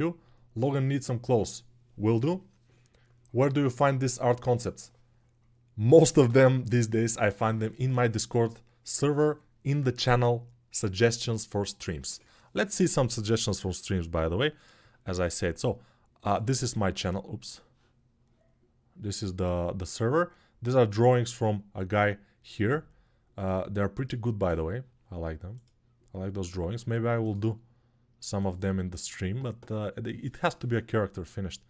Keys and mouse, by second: 17.8 click, 17.8 middle click, 18.0-31.6 drag, 18.0-31.6 middle drag.